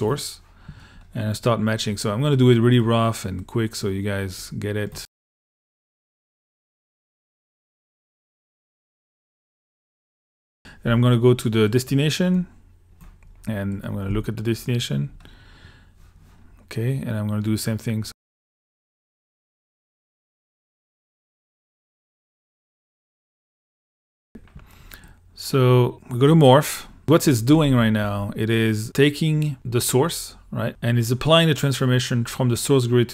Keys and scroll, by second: 14.1 1, 24.3 l.